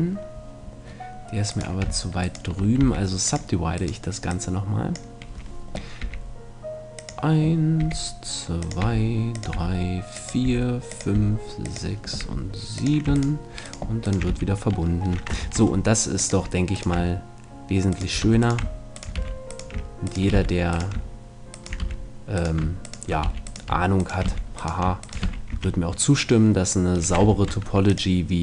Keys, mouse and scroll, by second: 1.5-5.7 right drag, 2.8 w, 4.3-6.2 drag, 6.0 e, 7.1-14.3 drag, 7.8 e, 8.8 e, 10.1 e, 10.5 e, 11.1 e, 12.2 e, 13.1-14.3 right drag, 14.3 f, 15.4 ctrl+Tab, 15.4 right click, 16.7 right click, 18.3 f, 19.2 f, 20.3 f, 21.8 f, 23.3 f, 24.3 f, 25.3 f, 25.5 a, 25.7-26.9 shift+middle drag, 27.3 ctrl+Tab.